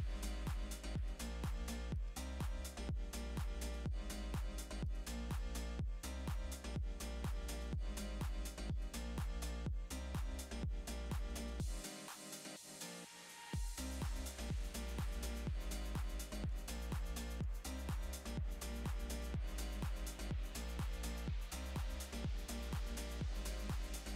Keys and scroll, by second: 1.0 space, 1.3 space, 4.8 super+space, 5.4 space, 7.7 v, 10.2 r, 12.8 v, 15.1 super+space, 15.8 space, 19.5-20.3 typing, 21.8 alt+super+space.